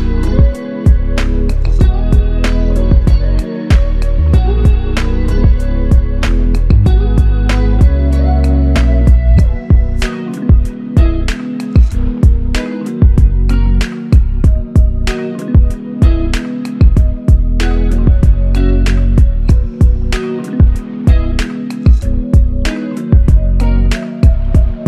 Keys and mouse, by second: 1.1 alt+click, 6.7 double click, 14.8 shift+click, 17.5 alt+click, 18.5-19.3 typing, 21.8-22.6 typing.